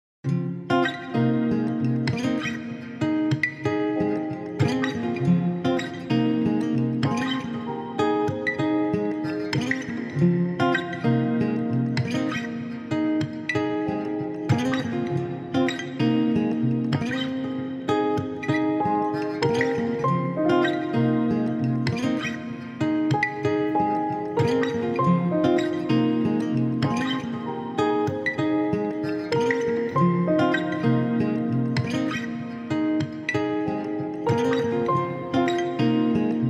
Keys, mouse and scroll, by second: 0.9 x, 1.9 shift+middle click, 2.6 click, 3.8 x, 8.7 ctrl+s, 12.2-13.4 middle drag, 13.8 KP_1, 15.8 middle click, 17.1 ctrl+r, 19.3 s, 20.9 KP_1, 22.0-22.5 scroll up 1, 22.5-23.5 middle drag, 23.5-24.2 scroll down 1, 24.2 middle click, 24.9 click, 26.2-27.4 scroll up 1, 27.4 scroll up 1, 28.1 KP_1, 29.4 alt+z, 29.8 shift+middle click, 30.8-32.1 middle drag, 32.1-33.9 scroll down 1, 33.9 KP_3, 35.2 alt+z.